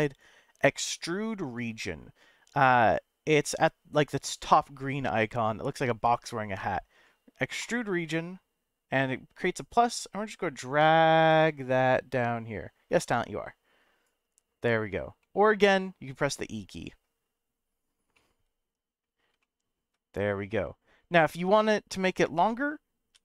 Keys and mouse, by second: 9.4-14.0 drag, 15.2-17.0 middle drag, 18.1 middle click, 19.4 shift+middle click, 23.1 e.